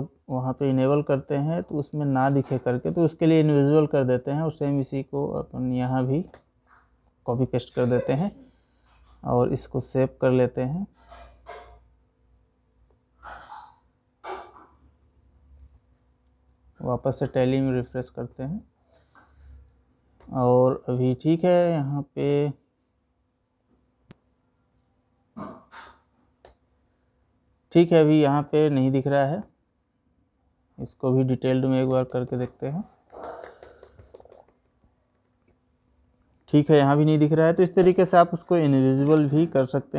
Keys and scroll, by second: 0.4 ctrl+c, 6.5 ctrl+v, 21.8 Down, 24.2 Escape, 25.4 Down, 28.9 Escape.